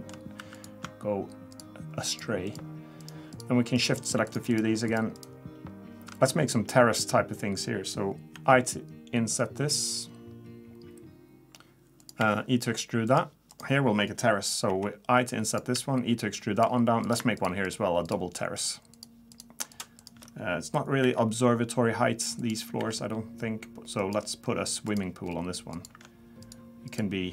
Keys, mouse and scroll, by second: 0.4 3, 0.6 click, 1.5 shift+click, 2.1 shift+click, 2.6 click, 3.4 click, 4.3 shift+click, 4.5 shift+click, 8.3 i, 12.2 e, 13.5 click, 14.7 i, 15.7 e, 17.0 click, 17.4 shift+click, 17.6 shift+click, 18.7 shift+click, 19.7 shift+click, 20.0 shift+click, 21.0 i, 22.8 e, 24.4 scroll up 1, 24.9 click, 25.3 scroll down 2, 25.7 click, 26.4 shift+click, 26.9 click.